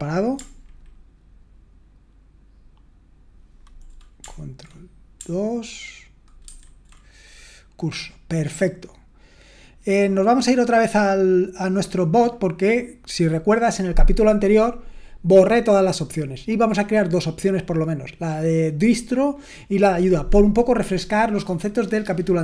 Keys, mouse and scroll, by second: 6.5 ctrl+1, 7.1-8.1 drag, 9.8-11.0 drag, 12.3-13.3 drag.